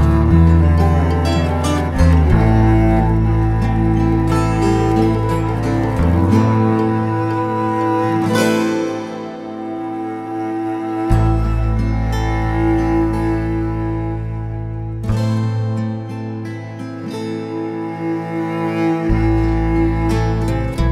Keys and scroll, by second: 1.7 2, 1.8 0, 2.3 Return, 6.6 4, 6.8 0, 7.0 Return, 14.5 1, 14.8 0, 15.1 Return.